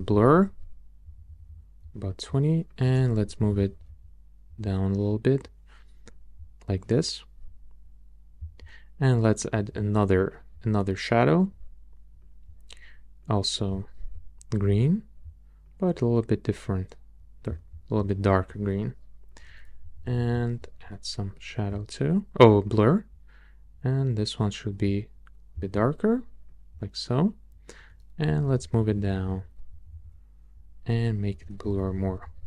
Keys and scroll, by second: 1.0 Down, 1.8 Up, 3.2 Up, 4.0 Up, 19.8 Up, 28.2 Up, 29.7 Down, 31.4 Up, 32.2 Up.